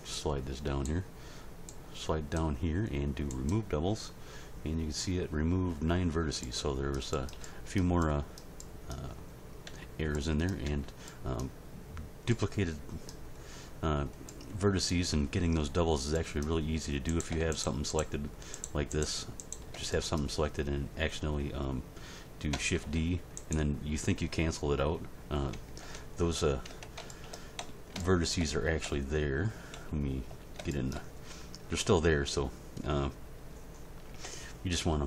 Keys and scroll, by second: 9.7 a, 22.7 shift+d, 25.8 Tab, 27.6 z, 28.8 z, 30.3 a, 34.1 Tab.